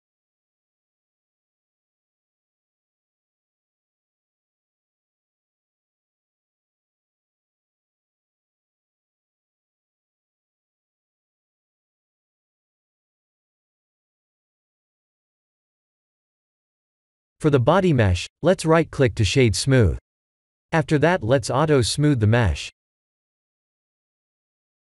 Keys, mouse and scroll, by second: 0.7-1.8 scroll down 5, 1.8 click, 5.5 click, 6.8 click, 7.7 click, 11.9 click, 11.9-12.5 scroll down 4, 14.6 click, 15.2 KP_1, 16.0 shift+z, 16.9 shift+z, 18.9 click, 20.5 middle click, 23.4 click, 24.6 right click.